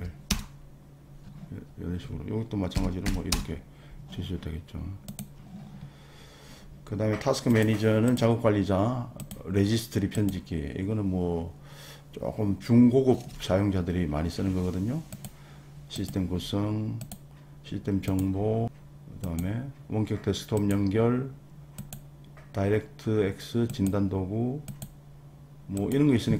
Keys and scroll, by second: 0.0-0.4 typing, 2.5-3.5 typing.